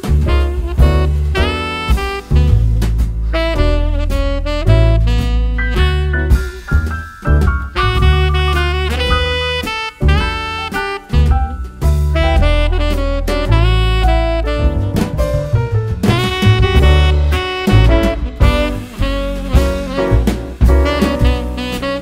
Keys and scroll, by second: 2.3 super+c, 5.9 super+v.